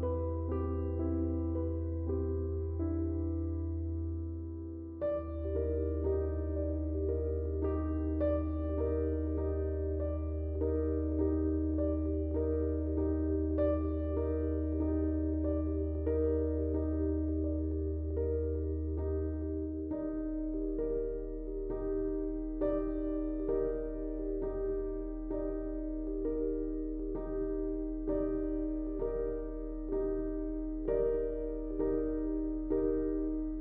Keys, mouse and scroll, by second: 17.1 ctrl+space, 17.3 ctrl+click, 17.4 ctrl+space, 18.0-33.6 drag, 21.0 typing.